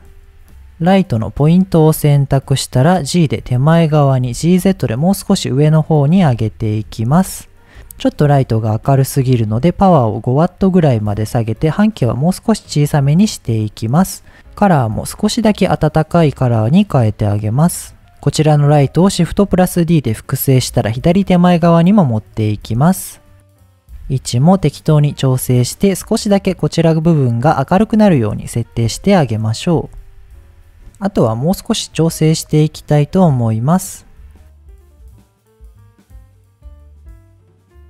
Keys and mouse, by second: 0.4 shift+a, 1.9 g, 3.2 click, 3.6-3.9 middle drag, 4.3 g, 4.5 z, 5.5 click, 6.1 KP_7, 6.9 g, 8.8-10.7 drag, 11.2-13.0 drag, 14.3 click, 19.3 shift+d, 20.5 click, 22.6 g, 23.4 click, 23.5 middle click, 23.9 g, 23.9 z, 25.4 click, 28.8 KP_7, 29.7 g, 30.4 click, 32.9 click, 33.7 middle click, 34.6 shift+click, 35.2-35.7 shift+drag, 36.0 middle click, 36.3-36.8 shift+drag.